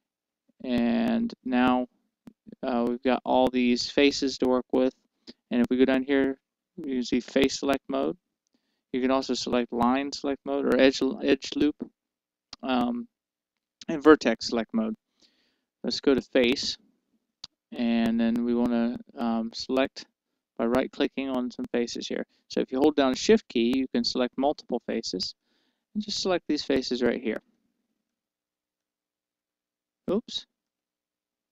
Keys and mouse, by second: 9.6-13.8 drag, 15.9-20.0 drag, 21.9-24.0 right drag, 25.9-31.5 right drag.